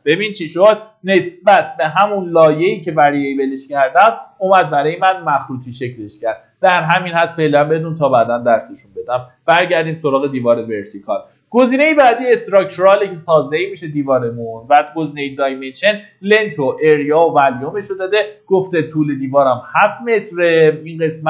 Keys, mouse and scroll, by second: 0.3 click.